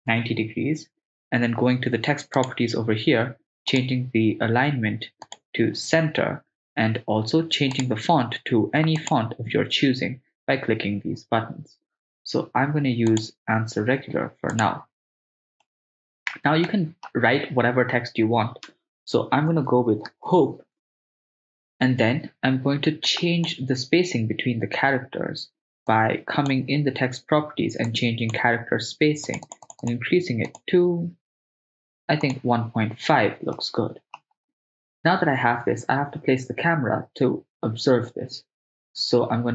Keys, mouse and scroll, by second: 0.2 Return, 2.4 click, 3.7-5.5 drag, 7.8 click, 9.0 click, 15.7-16.5 ctrl+middle drag, 16.8 shift+middle click, 18.7 Tab, 18.9-20.5 typing, 21.5 Tab, 23.1 click, 25.9 click, 27.9 click, 29.3 click, 29.7 click, 30.5-32.5 drag, 33.6 middle click.